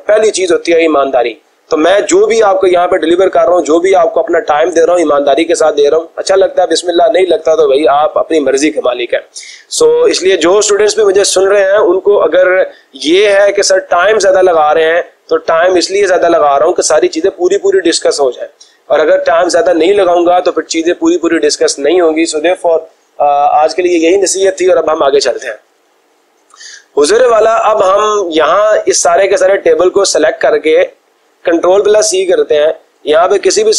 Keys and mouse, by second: 31.0 click, 32.2 ctrl+c.